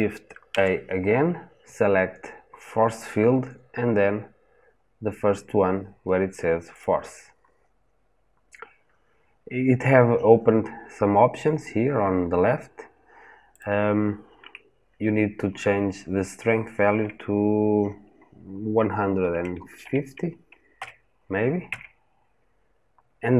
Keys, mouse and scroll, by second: 21.6 KP_Enter.